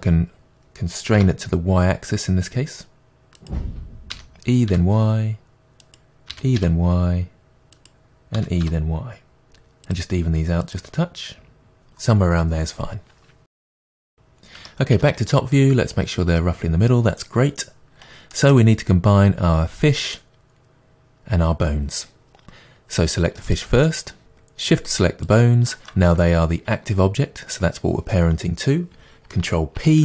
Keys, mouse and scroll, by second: 3.5 click, 4.1 e, 5.9 click, 6.3 e, 7.8 click, 8.4 e, 10.2 click, 11.0 click, 11.5 g, 12.2 y, 12.5 click, 12.9 g, 14.6 Tab, 14.9 KP_7, 18.3-23.5 middle drag, 23.5 click, 25.3 shift+click, 29.8 ctrl+p.